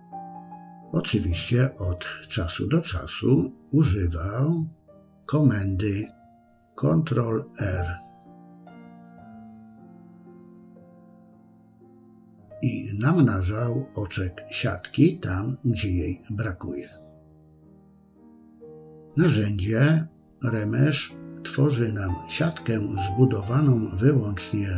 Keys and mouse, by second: 0.1 click, 0.4 click, 0.8 click, 1.0 middle click, 1.5 middle click, 2.4 click, 2.8 click, 2.9 middle click, 3.2 click, 3.6 click, 3.8 click, 4.1 click, 4.4 middle click, 5.0 middle click, 5.8 click, 6.4 middle click, 7.1 ctrl+r, 7.5 middle click, 8.6 click, 9.0 click, 9.5 shift+click, 9.9 shift+click, 10.6 middle click, 10.8 shift+click, 11.1 middle click, 11.3 shift+click, 11.5 shift+click, 11.6 middle click, 11.9 shift+click, 12.0 middle click, 12.5 click, 12.8 middle click, 13.1 click, 13.3 shift+click, 13.7 middle click, 14.1 shift+click, 14.2 shift+click, 14.5 middle click, 14.7 shift+click, 15.0 middle click, 16.0 shift+middle click, 16.8 ctrl+r, 17.2 middle click, 17.5 shift+click, 17.7 middle click, 18.1 middle click, 18.6 middle click, 19.3 click, 19.7 click, 20.1 click, 20.6 ctrl+r, 21.0 shift+click, 21.6 middle click, 22.1 middle click, 22.4 click, 22.8 middle click, 23.1 click, 23.7 click, 24.6 ctrl+r.